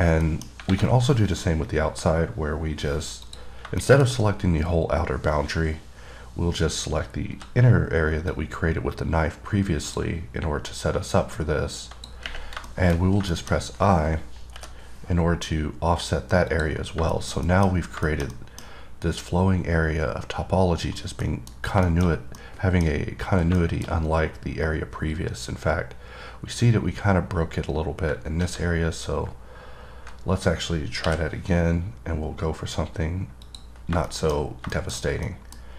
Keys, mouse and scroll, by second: 0.2-0.5 scroll down 2, 0.5 middle click, 1.2 scroll down 1, 3.5 click, 4.1 middle click, 6.3-7.6 scroll down 1, 8.0 scroll up 3, 8.5-10.4 drag, 10.9 click, 12.9 middle click, 13.2-16.0 scroll up 4, 13.6 middle click, 16.7 click, 17.1 scroll down 3, 17.4 middle click, 17.6-18.1 scroll up 3, 17.7 middle click, 18.3 middle click, 18.6 double middle click, 18.9 scroll up 2, 21.2-21.5 scroll down 1, 21.5 middle click, 21.8 scroll down 1, 22.1 middle click, 22.3 scroll down 1, 22.6 middle click, 23.8 middle click, 24.2-25.9 scroll up 6, 30.6-31.5 scroll down 1, 33.7-34.1 scroll down 1, 34.2-34.7 scroll down 3, 34.3 middle click, 35.0 middle click, 35.2 scroll down 1, 35.5 middle click.